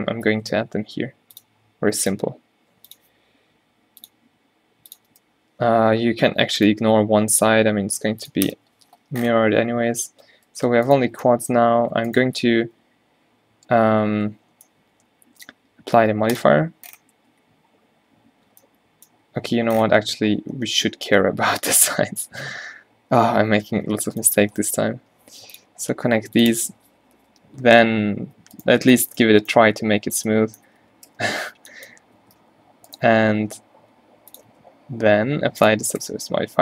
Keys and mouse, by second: 0.7 k, 6.1 k, 9.0 click, 9.7 a, 12.6 ctrl+e, 14.2 Tab, 17.4 Tab, 20.4 Tab, 21.0 ctrl+z, 22.8 ctrl+z, 23.1 Tab, 24.0 a, 24.9 k, 27.4 Tab, 27.8 Tab, 29.9 q, 30.8 q, 31.2 Tab, 32.3 Tab, 33.1 g, 34.3-34.9 drag, 34.6 Tab, 36.2 Tab.